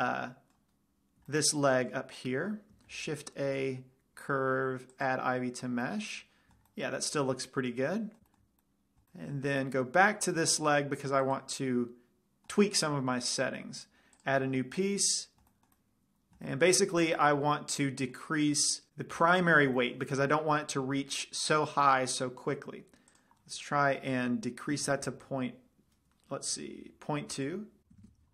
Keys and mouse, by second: 3.2 shift+a, 6.3-7.2 middle drag, 7.9-8.2 middle drag, 8.3 middle click, 9.2 middle click, 11.6-12.2 drag, 12.1-13.4 middle drag, 22.9-23.9 middle drag, 23.5-25.2 drag, 27.7 click.